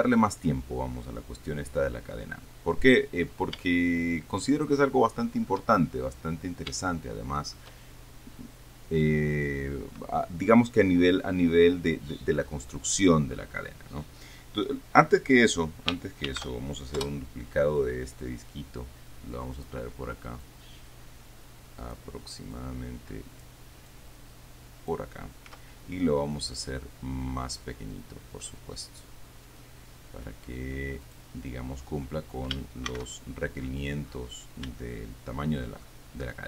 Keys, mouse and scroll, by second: 0.7-1.4 scroll down 1, 3.3-3.9 scroll down 3, 3.9-5.9 shift+middle drag, 6.5-7.1 scroll up 2, 7.2 shift+middle click, 8.0-9.0 shift+scroll down 1, 16.5 shift+d, 17.3 Return, 18.5-20.1 drag, 21.0-22.4 drag, 22.8-23.9 drag, 24.2-25.4 drag, 25.8 s, 31.4 click, 33.2 shift+c, 34.6-35.1 scroll up 2, 35.1-36.2 shift+middle drag.